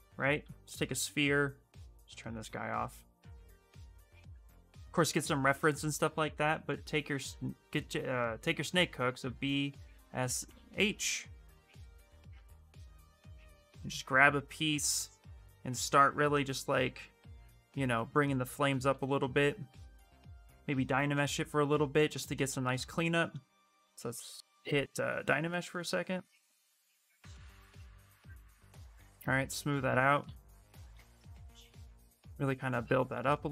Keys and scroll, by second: 4.0 shift+f, 4.5 shift+f, 6.4 n, 6.8 s, 8.9-10.9 typing, 18.6-19.3 typing, 20.9 2.